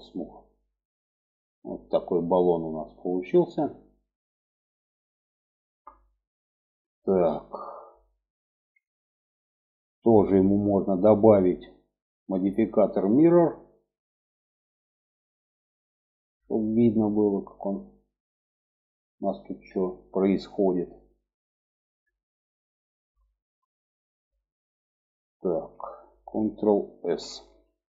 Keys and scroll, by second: 26.3 ctrl+s.